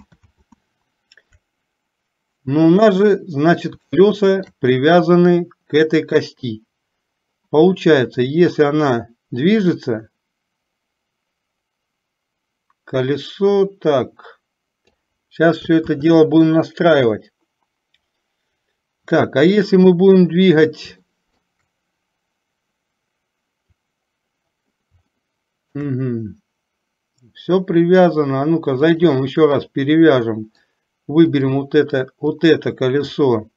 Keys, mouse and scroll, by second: 0.5 ctrl+z, 4.1 shift+middle click, 6.5 click, 8.5-15.1 drag, 21.3 shift+middle click, 25.3-26.0 shift+middle drag, 29.0-30.0 drag, 30.5 middle click, 32.4 click.